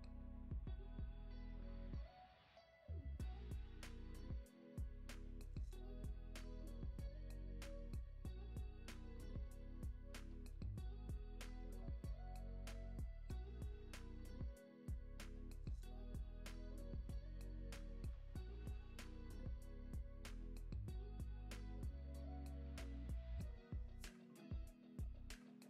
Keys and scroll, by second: 0.9 super+d, 6.4 super+d, 11.4 Delete, 22.6 Down, 23.1 Up, 23.5 Down, 23.8 Up, 24.2 Down, 25.4 super+s.